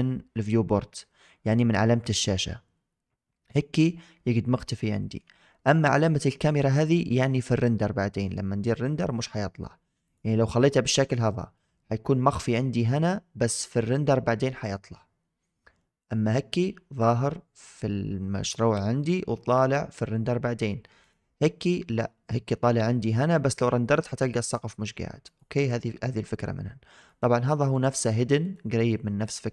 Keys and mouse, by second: 1.9 click, 4.0-5.1 middle drag, 6.5 click, 9.9 click, 11.4-12.4 middle drag, 15.9-21.0 drag, 25.1 click, 27.0 click, 27.5 click, 27.8 click, 28.3 click, 29.1 click.